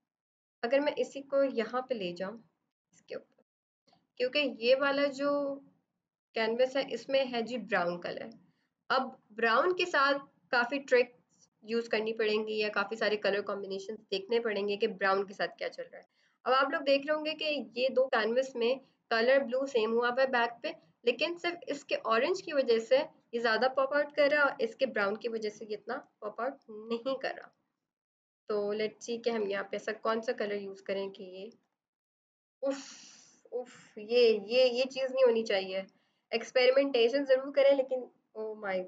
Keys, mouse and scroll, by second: 0.3 click, 1.4 ctrl+c, 1.9 scroll, 2.7 click, 3.3 ctrl+f, 3.9 right click, 6.0 click, 15.0 click, 25.9 ctrl+=, 27.9 click, 34.7 ctrl+-.